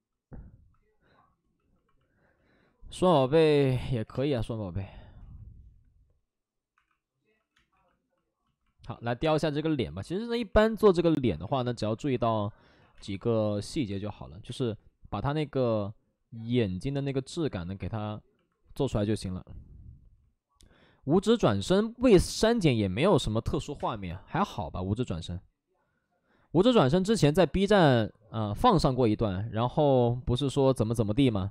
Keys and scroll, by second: 3.7 space, 4.0 3, 4.1 space, 5.2 ctrl+z, 6.7 1, 7.3 ctrl+z, 7.5 space, 7.7 1, 11.2 1, 12.7 ctrl+z, 12.9 space, 13.9 space, 14.2 ctrl+z, 14.4 space, 23.6 5, 23.7 space, 25.0 ctrl+z, 27.0 ctrl+z, 27.7 3, 28.6 ctrl+z, 30.0 ctrl+z.